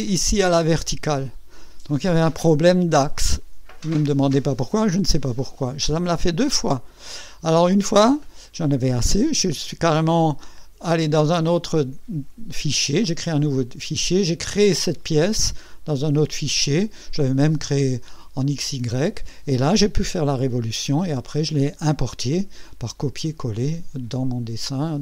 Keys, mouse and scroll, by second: 5.2-6.5 drag.